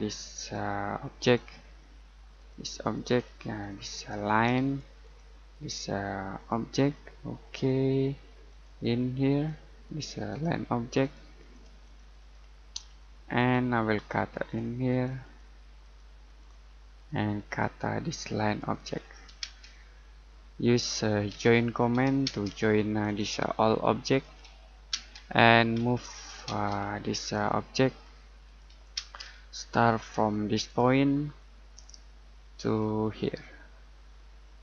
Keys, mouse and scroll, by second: 0.3 click, 1.7-2.3 scroll up 1, 2.3 click, 3.1-3.6 scroll down 1, 3.6 click, 6.7 scroll down 1, 7.0 middle click, 7.4-8.4 scroll up 1, 8.4 click, 12.6 middle click, 12.8-13.3 scroll up 1, 13.3 click, 16.6-17.3 scroll up 1, 17.4 click, 19.0-19.4 scroll down 1, 19.4 space, 19.8 middle click, 21.3 j, 22.2 space, 23.0 click, 24.9 space, 25.7 m, 26.4 space, 27.1 click, 28.9 space, 30.5 click, 31.0-31.4 scroll down 1, 31.4 middle click, 32.3-34.6 scroll up 1.